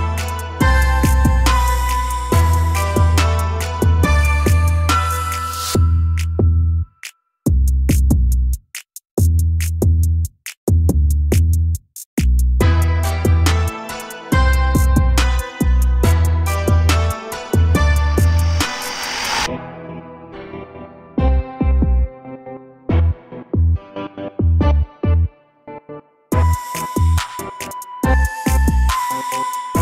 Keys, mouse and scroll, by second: 0.1 g, 3.0-3.4 shift+middle drag, 3.4 scroll down 2, 3.7 a, 3.9 a, 5.4-6.3 scroll down 3, 7.4 click, 9.6 click, 11.0-11.6 scroll up 1, 12.0 shift+middle click, 12.3-12.9 scroll up 3, 12.9 click, 13.1 Tab, 13.6 2, 14.1 click, 14.5 g, 16.0 click, 16.2 g, 17.2 click, 17.5-19.3 typing, 18.7 scroll down 2, 18.8 Tab, 19.8 click, 20.6 middle click, 21.4 click, 27.6 a, 27.8 a, 28.0-28.6 scroll down 2, 28.6-29.8 shift+middle drag.